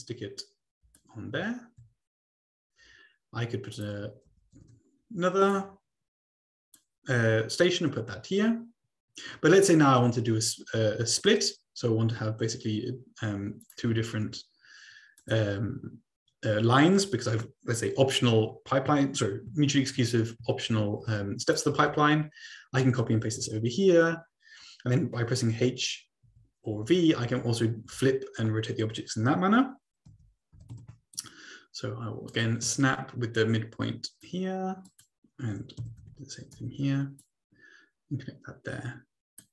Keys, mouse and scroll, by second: 1.8-2.2 ctrl+scroll down 2, 3.7 click, 4.3 ctrl+c, 4.6 ctrl+v, 5.5-7.3 drag, 11.2 click, 12.9-13.8 scroll down 2, 13.8 click, 15.2-16.2 drag, 20.1-20.7 ctrl+scroll up 1, 21.1 ctrl+c, 21.6 click, 21.9 ctrl+v, 23.2 ctrl+c, 23.4 ctrl+v, 25.4-27.9 typing, 30.1-31.2 typing, 31.1-32.4 drag, 32.8-33.7 ctrl+scroll up 2, 33.9 ctrl+click, 35.0 click, 35.8-36.6 typing, 37.2-38.3 drag, 39.4 click.